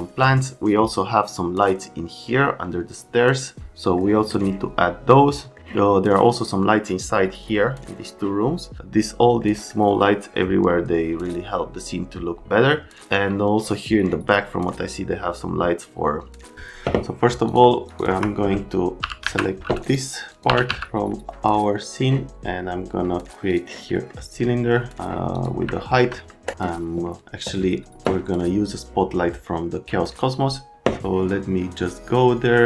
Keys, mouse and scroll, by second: 4.0 middle click, 5.5 middle click, 9.4 middle click, 17.5 click, 17.8 click, 18.1 F3, 19.0 t, 19.8 right click, 20.2-21.2 typing, 20.3 click, 21.8 middle click, 23.5 click, 23.9 right click, 25.3 click, 25.7 right click, 26.4 scroll.